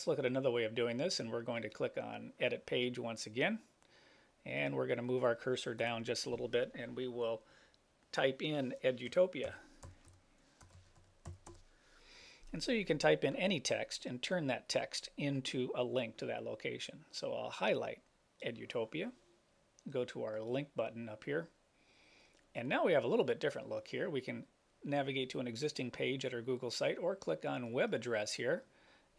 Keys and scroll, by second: 5.9 Return.